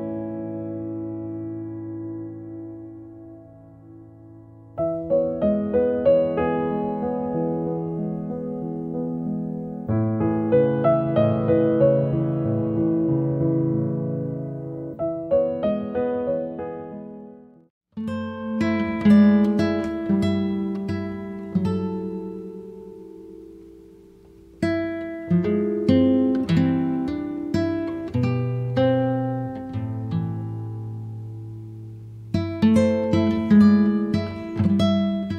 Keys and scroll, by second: 18.8 1, 19.1 KP_Decimal, 19.2 5, 20.9 KP_Decimal, 21.7 5.